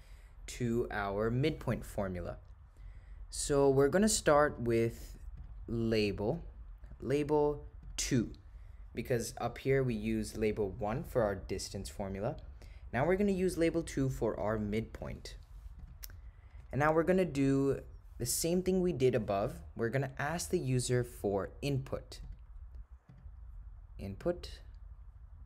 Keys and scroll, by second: 4.5 Right, 5.4 Left, 6.3 9, 7.9 2, 15.9 Return, 23.1 Right, 24.3 Return.